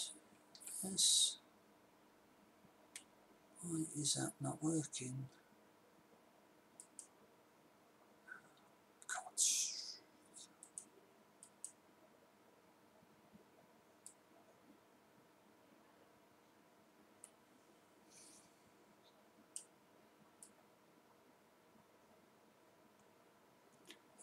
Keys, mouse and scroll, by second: 0.7 s, 8.1-9.9 middle drag, 10.4 click, 13.3 click, 14.4-15.9 drag, 20.8-22.7 drag, 23.0 click.